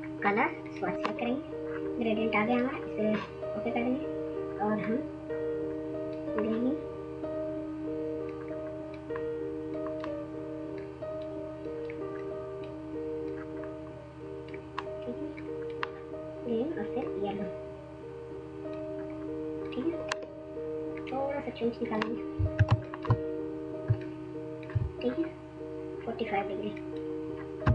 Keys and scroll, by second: 22.6 ctrl+space, 23.0 ctrl+space, 27.5 typing.